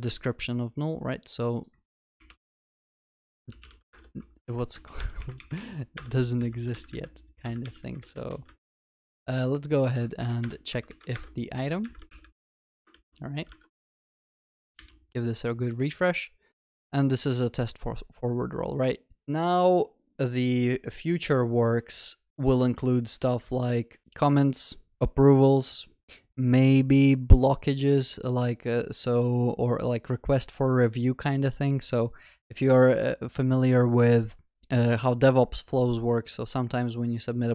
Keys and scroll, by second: 3.8 Tab, 7.8 alt+shift+Up, 10.4 alt+shift+Up, 11.1 shift+Return, 12.0 shift+Return, 12.5 ctrl+y, 12.6 ctrl+alt+shift+l, 13.0 ctrl+s.